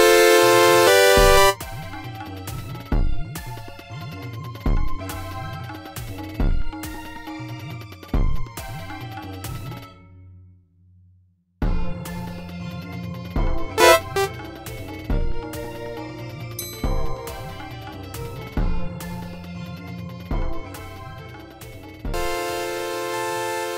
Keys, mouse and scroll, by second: 1.4 space, 3.1 click, 5.3 e, 8.3 click, 9.5 click, 11.2 click, 12.4 e, 13.6-14.6 drag, 15.4 right click, 16.5 click, 18.6 1, 19.5 click, 22.1 space.